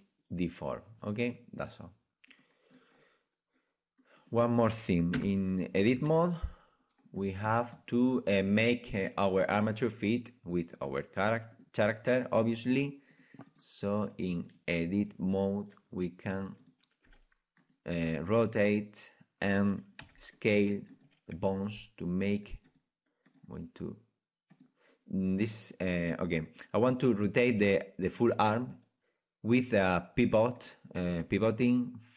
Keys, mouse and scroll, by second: 0.8-2.4 middle drag, 2.4-6.0 drag, 5.1 KP_1, 6.0 KP_Decimal, 7.2-11.5 middle drag, 11.5-13.0 right drag, 13.0-20.3 drag, 17.0 r, 20.3 c, 23.3-32.1 drag.